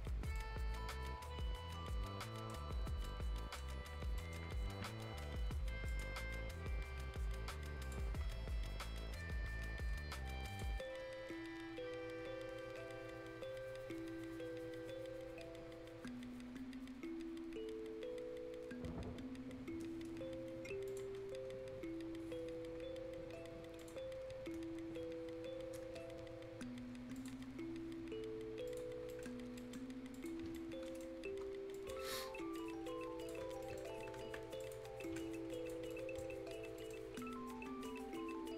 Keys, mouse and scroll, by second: 0.2 scroll down 1, 0.4-2.8 right drag, 2.8 scroll down 1, 3.1 right click, 3.9 scroll up 1, 4.2 right click, 5.9 click, 6.3 scroll up 1, 7.8 click, 8.1 scroll down 1, 8.3-8.7 scroll up 1, 10.5 click, 11.0-13.1 scroll up 1, 13.1-13.5 scroll down 1, 13.5-14.6 scroll up 1, 14.6-15.4 scroll down 1, 17.2 scroll up 1, 20.9 scroll up 1, 21.2 scroll down 1, 21.8 scroll up 1, 23.8 click, 24.6 scroll down 1, 25.9 scroll up 1, 27.4 scroll down 1, 28.0 scroll up 1, 28.7 click, 28.9 scroll up 1, 29.1 right click, 29.3 scroll down 1, 29.6 right click, 29.8 scroll up 1, 30.1 click, 30.5 right click, 31.3 F10, 31.4-31.7 scroll up 1, 31.7 click, 32.1 right click, 32.6 click, 33.5 scroll down 1, 33.6 right click, 34.0 Escape, 34.5 scroll up 1, 34.6 click, 34.9 scroll down 1, 35.0 right click, 35.3 scroll up 1, 35.5 click, 35.9 right click, 36.4 scroll up 1, 36.8 right click, 37.0 scroll down 1, 37.2 right click, 38.2 scroll up 1.